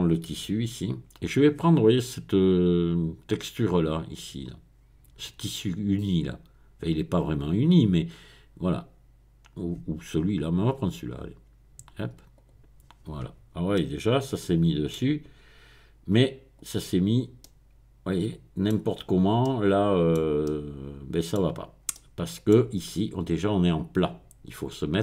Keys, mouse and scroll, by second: 0.1 click, 7.3-8.1 scroll down 1, 10.6 click, 12.4 click, 16.6 click, 19.0-19.4 scroll up 1, 20.5-21.7 middle drag, 21.9 middle click.